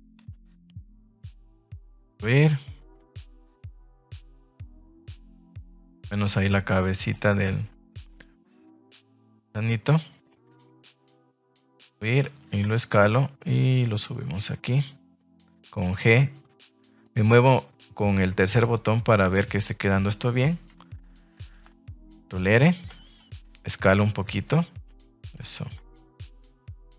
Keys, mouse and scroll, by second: 1.2 click, 3.9 click, 4.2 middle click, 4.8 shift+middle click, 5.1 middle click, 7.0 click, 7.2 middle click, 8.7 g, 9.3 click, 9.4 r, 11.5 e, 11.9 Escape, 12.2 s, 12.9 click, 13.0 g, 14.5 click, 14.7-15.7 middle drag, 15.8 g, 17.0 click, 17.2-20.0 middle drag, 20.9 middle click, 22.0 ctrl+r, 22.7 Escape, 23.1 middle click, 23.4 s, 24.4 click, 24.7 g, 25.2 click, 25.4 Tab, 25.7-26.6 middle drag, 26.8 Tab.